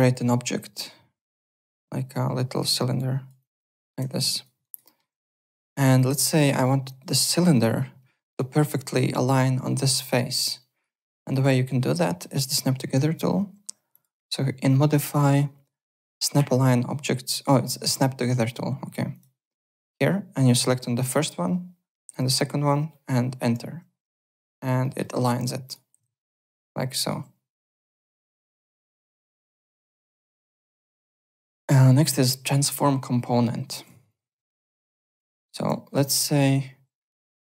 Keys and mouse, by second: 0.3 shift+right click, 2.7 click, 3.3 click, 4.0 w, 4.2 alt+click, 4.6 alt+right click, 4.8 alt+middle click, 5.1 `, 5.2 click, 5.9 alt+click, 6.2 alt+right click, 7.0 alt+right click, 8.1 alt+middle click, 8.3 alt+right click, 10.5 alt+right click, 10.9 alt+middle click, 11.3 alt+right click, 11.6 alt+click, 12.0 alt+middle click, 12.2 alt+right click, 13.9 click, 19.1 click, 21.0 click, 22.1 click, 23.9 Return, 24.8 alt+middle click, 25.0 alt+right click, 25.6 click, 25.9 z, 26.2 alt+right click, 26.3 alt+click, 27.7 click, 28.6 click, 30.1 click, 33.8 click, 34.0 click, 34.3 right click, 34.7-35.6 typing, 35.8 alt+middle click, 36.0 alt+right click.